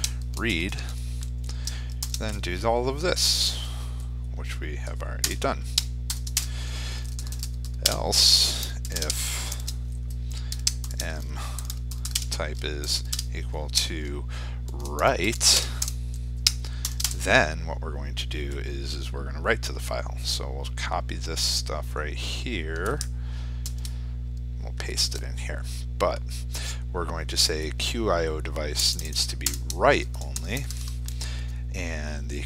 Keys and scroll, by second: 23.3 ctrl+c, 24.8 ctrl+v.